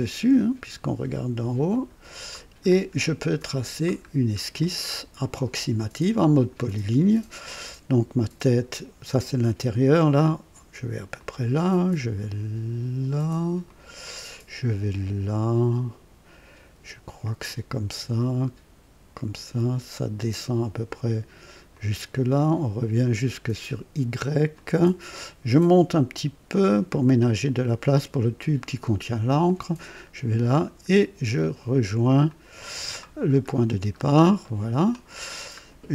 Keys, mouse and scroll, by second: 1.6 click, 2.6-3.0 scroll up 2, 3.1-3.9 right drag, 4.0 scroll up 1, 4.6-5.3 right drag, 6.5 click, 11.1 click, 13.6 click, 17.4 click, 19.1 click, 21.7 click, 24.5 click, 26.7 click, 29.4 click, 32.2 click, 33.3-34.2 scroll up 3, 34.4 right click, 35.2-35.5 scroll down 2.